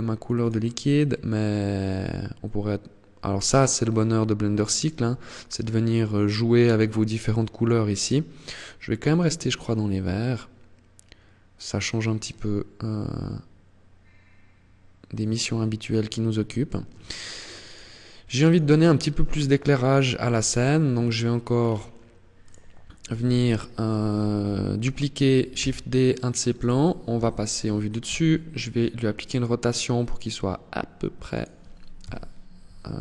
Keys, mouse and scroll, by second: 17.2-18.8 click, 19.5-20.1 scroll down 5, 20.1 middle click, 20.7 scroll down 4, 21.6 right click, 23.7 KP_1, 24.7 shift+d, 25.9 click, 26.3 KP_7, 27.2 r, 30.7 click, 31.2 KP_3, 32.3 shift+middle click.